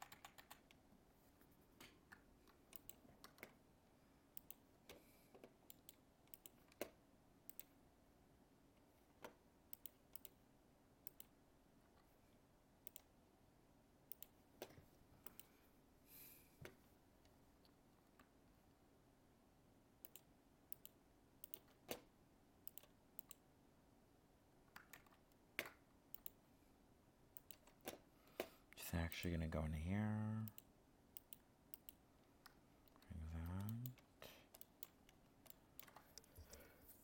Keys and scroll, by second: 24.9 ctrl+z.